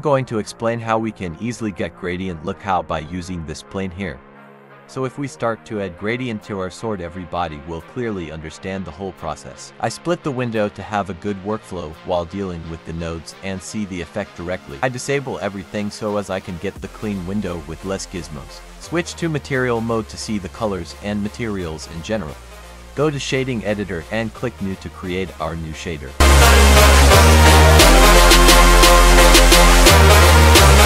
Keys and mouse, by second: 1.8 click, 3.6 t, 4.8 click, 6.4 click, 9.2 click, 12.0 click, 16.5 z, 21.8-23.5 drag, 25.2 n, 26.3 click, 26.8 click, 28.1 click, 29.9 click.